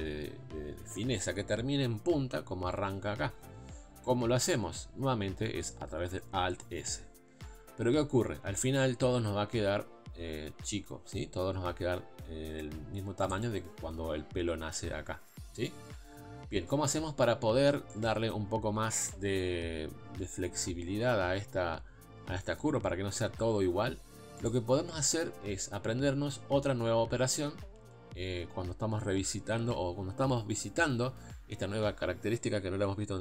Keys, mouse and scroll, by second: 6.4 alt+s, 16.7 scroll down 2, 17.2 scroll up 3, 17.9-24.5 shift+middle drag, 24.5 click, 25.5-29.2 scroll down 3.